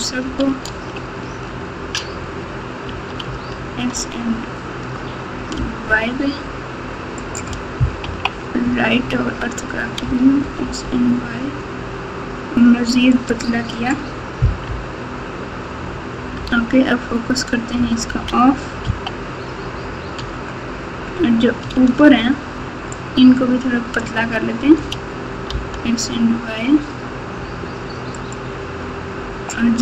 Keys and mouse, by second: 0.6 alt+z, 1.2 x, 2.8 s, 8.0 KP_3, 10.0 s, 14.6 KP_1, 16.3 KP_Divide, 17.7 KP_Subtract, 18.0 KP_Subtract, 18.1 KP_Subtract, 18.8 KP_3, 21.7 alt+z, 23.2 click, 24.7 s.